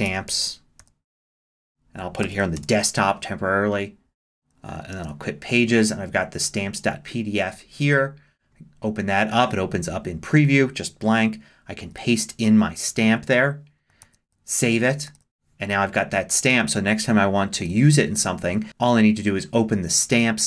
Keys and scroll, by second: 0.0-1.3 typing, 1.5 super+s, 1.6 super+d, 2.6 super+Return, 3.5 Return, 5.0 super+q, 11.8 super+v, 14.0 super+s, 15.1 super+w, 17.7 super+w.